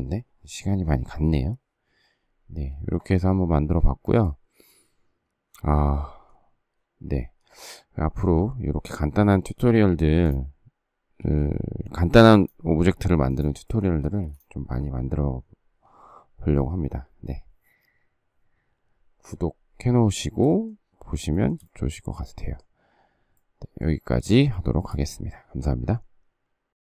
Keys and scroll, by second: 11.1 s, 14.0 space.